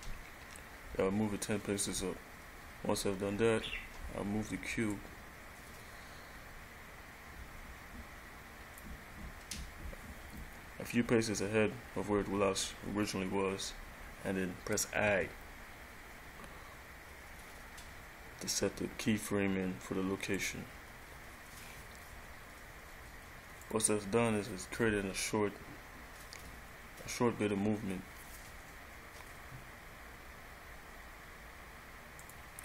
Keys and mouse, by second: 5.1 click, 15.3 i, 23.8 click, 32.4 click.